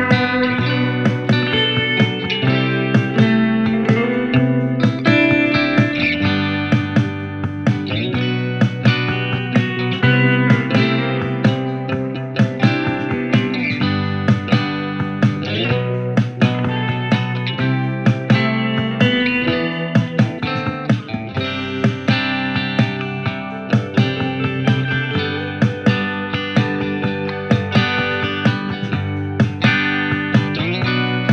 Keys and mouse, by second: 17.6 f, 18.6 alt+middle click, 19.8 g, 20.4 f, 21.3-29.3 drag, 28.7 f, 29.7-31.3 drag.